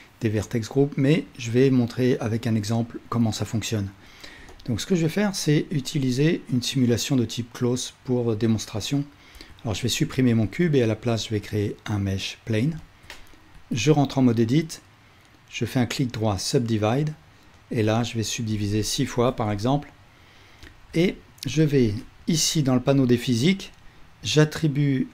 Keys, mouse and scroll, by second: 4.5-17.8 alt+middle drag, 9.4 x, 10.5 shift+a, 17.9-20.7 middle drag, 21.1-23.6 alt+shift+middle drag, 21.5 Tab.